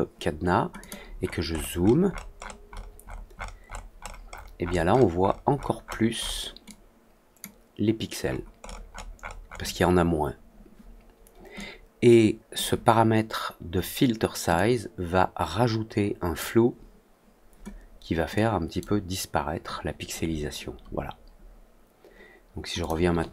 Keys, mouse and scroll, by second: 0.7 click, 1.1-1.6 scroll up 2, 1.8 scroll down 1, 2.0 scroll up 1, 2.3 scroll down 1, 2.6-4.7 scroll up 7, 4.8 scroll down 1, 5.1-5.7 scroll up 2, 5.8 middle click, 6.1 middle click, 6.6-7.3 drag, 8.2 middle click, 8.5 middle click, 8.9 middle click, 9.1 middle click, 9.4 middle click, 11.5-12.5 drag, 14.5-16.3 drag, 18.3-18.7 drag, 22.7 click.